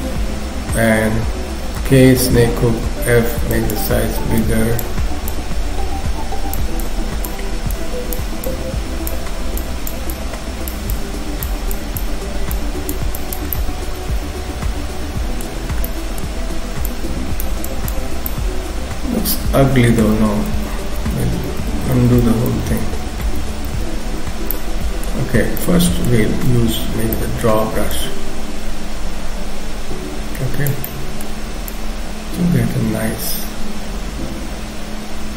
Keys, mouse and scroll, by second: 1.8 k, 2.7 f, 4.4 click, 5.3 click, 7.8 click, 8.5 click, 10.1 click, 11.0 click, 12.6 click, 13.6 middle click, 15.6 scroll up 2, 15.9 middle click, 16.9 click, 17.7 click, 18.1-18.5 scroll down 3, 18.3 middle click, 20.3 ctrl+z, 20.6 ctrl+z, 20.8 ctrl+z, 21.2 ctrl+z, 21.4 ctrl+z, 21.6 ctrl+z, 21.8 ctrl+z, 23.4 ctrl+z, 23.8 ctrl+z, 24.5 middle click, 25.2-26.0 scroll up 3, 25.6 middle click, 26.5 x, 26.8-27.2 scroll up 2, 27.2 middle click, 28.0 click, 30.8 middle click, 31.8 click.